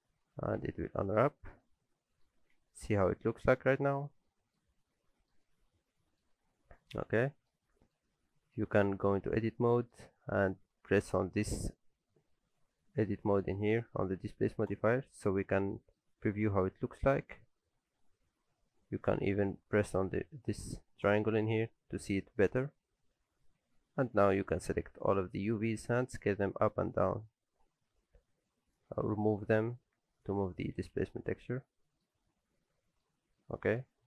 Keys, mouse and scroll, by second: 0.3 middle click, 0.7 Tab, 1.0 middle click, 1.3 shift+middle click, 1.6 middle click, 2.4 alt+a, 2.5 middle click, 3.6 shift+middle click, 4.0-4.6 scroll up 3, 4.3 middle click, 4.6-5.3 scroll down 2, 4.9 middle click, 5.4 middle click, 6.3 middle click, 7.6 shift+middle click, 8.1 middle click, 8.9 Tab, 9.3 a, 9.6 scroll down 1, 9.8 middle click, 14.7 click, 15.5 scroll up 1, 15.7 middle click, 21.1 click, 24.4 click, 26.0 s, 30.7 alt+a, 31.0 Tab, 31.1 scroll down 3, 31.4 alt+a, 31.6 middle click, 32.1-32.9 scroll up 4, 32.6 middle click, 33.1 scroll down 1, 33.4 middle click.